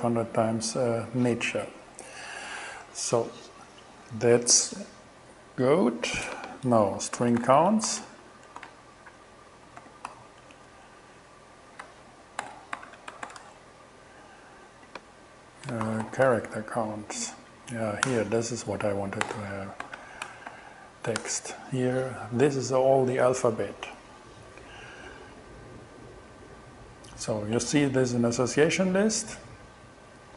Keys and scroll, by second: 6.8-10.7 typing, 12.5 alt+g, 12.7-13.8 typing, 15.6-16.8 typing, 17.5 Down, 18.1 Return, 19.0 alt+Return, 19.3 alt+g, 19.8-21.1 typing, 21.2 shift+Return.